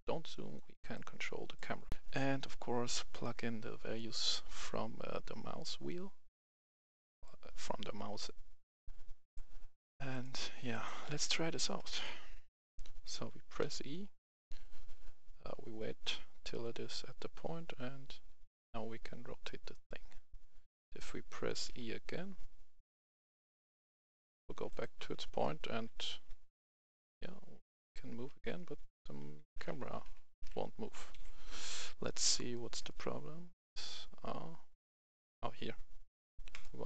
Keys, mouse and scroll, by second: 1.9 right click, 1.9 F10, 3.1-10.1 drag, 11.9 right click, 12.2 w, 12.7 a, 13.6 e, 21.7 e, 24.7 click, 25.1-30.3 typing, 31.1 Escape, 32.5 right click, 33.2 scroll down 1, 33.9 right click, 33.9-35.0 scroll up 1, 35.0 right click, 36.5 click.